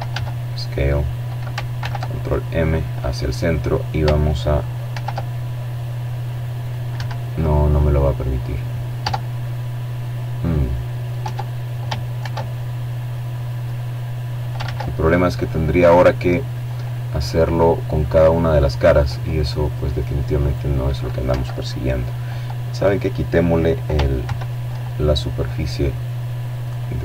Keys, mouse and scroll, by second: 2.5 ctrl+r, 4.5 Escape, 5.3 click, 6.1 middle click, 6.5 Tab, 7.1-7.6 scroll down 1, 7.6 middle click, 8.8 Tab, 9.7 ctrl+r, 11.2 click, 12.2 ctrl+z, 12.7 ctrl+click, 12.9-17.8 middle drag, 18.0 right click, 21.8 ctrl+1, 22.4-24.7 ctrl+middle drag, 24.9 click, 26.0 click, 26.6 middle click.